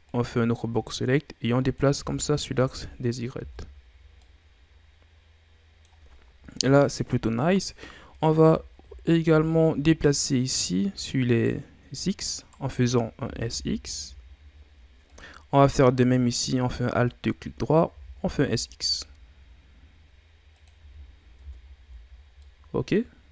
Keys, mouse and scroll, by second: 0.1-2.0 drag, 2.0 z, 2.7 Tab, 3.1-3.9 scroll down 6, 3.4 a, 4.1-6.5 middle drag, 6.5 KP_7, 7.6-8.2 scroll up 4, 8.2 right click, 8.4 Tab, 8.9-9.3 shift+scroll down 4, 9.3 z, 11.3 alt+right click, 12.4 alt+right click, 13.2 s, 16.6 alt+right click, 17.9 s, 20.8 z, 21.4 Tab, 21.8 a, 22.0-22.4 scroll down 4, 22.4-23.3 middle drag.